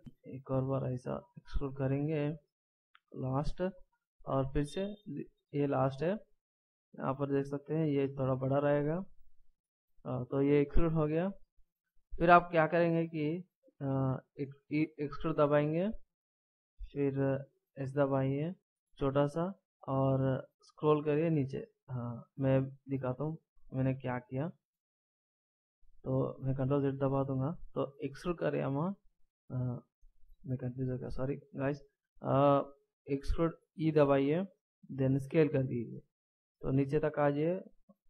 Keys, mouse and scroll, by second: 0.0 e, 4.3 e, 11.8 click, 14.5 e, 22.7 middle click, 24.2 shift+scroll down 1, 26.5 ctrl+z, 28.2 e.